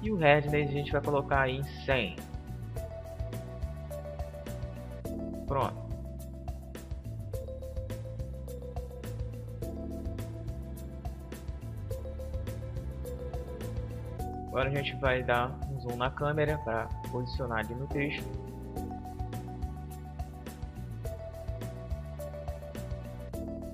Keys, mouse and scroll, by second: 2.0 KP_0, 10.7-12.7 right drag, 12.5 shift+f, 15.9-17.7 drag, 18.8 n, 20.2 click.